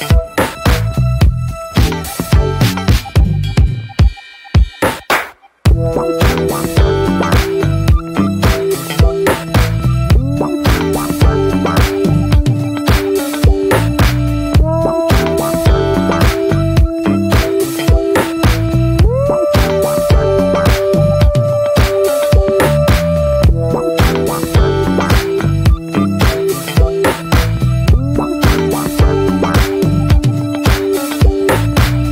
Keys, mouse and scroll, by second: 0.0 click, 0.7-1.1 scroll down 2, 1.1 middle click, 1.3-2.3 scroll up 1, 2.3-2.6 scroll up 1, 2.6-5.0 drag, 5.0-6.6 scroll up 4, 5.4-5.8 shift+middle drag, 6.6-7.1 middle drag, 7.1 ctrl+s, 9.2-15.5 drag, 15.5-18.6 middle drag, 18.6 drag, 18.9-19.6 scroll down 2, 19.6-21.6 drag, 21.6-21.9 scroll down 3, 21.9-22.7 middle drag, 22.7 ctrl+s, 22.9 scroll up 2, 23.2-23.8 shift+middle drag, 23.8 ctrl+s, 24.3 ctrl+s, 25.8 click, 25.9-26.3 scroll up 4, 26.3-26.6 alt+middle drag, 26.6-27.5 scroll up 2, 31.7-32.1 drag.